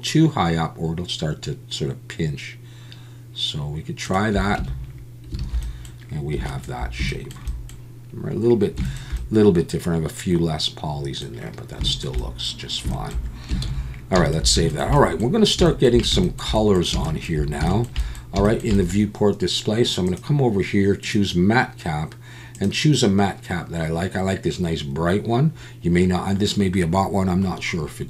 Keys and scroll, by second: 4.6 Tab, 5.4 alt+a, 13.6 ctrl+s.